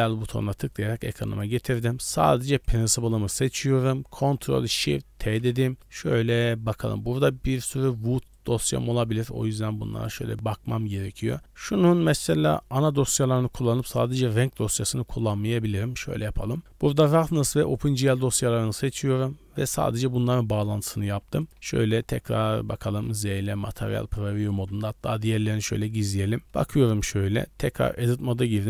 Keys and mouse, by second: 1.3 click, 2.6 click, 5.2 ctrl+shift+t, 21.0 g, 21.5 z, 22.9 z, 23.3-23.7 drag, 25.4 drag, 26.0 click, 27.6 Tab, 28.3 a.